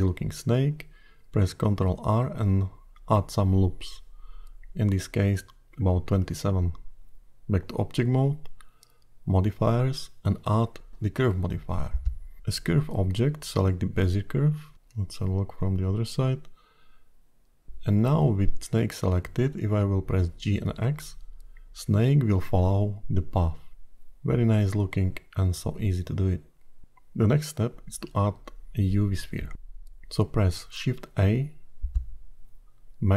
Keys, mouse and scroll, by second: 1.1 ctrl+r, 7.5 Tab, 9.0 click, 9.8 click, 12.5 click, 14.2-15.3 scroll down 2, 15.3 KP_1, 18.8 KP_7, 21.7 g, 30.9 shift+a.